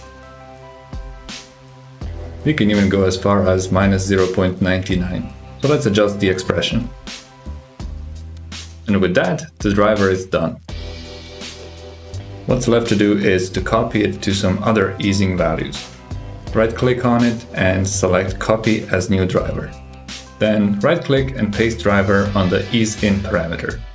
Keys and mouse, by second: 0.2 click, 0.8 g, 2.3 click, 3.9 ctrl+click, 5.9-8.1 drag, 9.2 click, 9.6 g, 13.8 click, 16.7-19.0 drag, 20.9-22.5 drag.